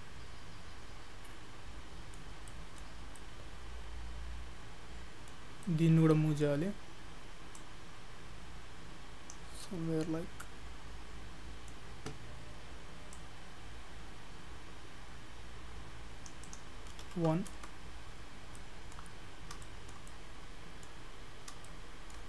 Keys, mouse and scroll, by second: 2.5 shift+middle click, 3.2 middle click, 5.5 scroll up 2, 5.7 middle click, 7.6 click, 9.6 middle click, 13.1 click, 16.5 click, 18.4-19.1 scroll down 5, 18.6 middle click, 19.1-19.7 scroll up 6, 19.7 shift+middle click, 20.1 middle click, 21.5 scroll up 2, 21.7 shift+middle click.